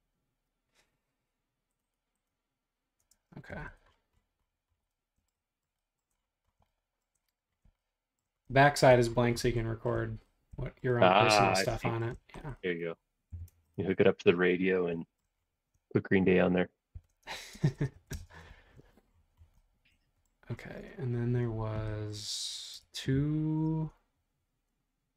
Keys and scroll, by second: 3.1 space, 3.5 Escape, 3.7 Escape, 13.3 b, 14.2 space, 16.9 shift+z, 17.5 space, 18.1 space, 22.9 super+Tab.